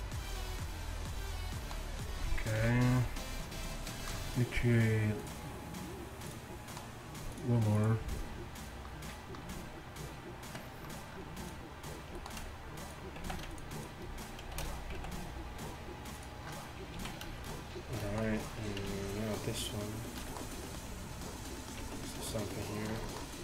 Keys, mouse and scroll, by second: 2.7 KP_1, 11.5 right click, 13.3 z, 14.6 shift+d, 17.0 z, 18.9 Tab, 21.9 ctrl+Tab.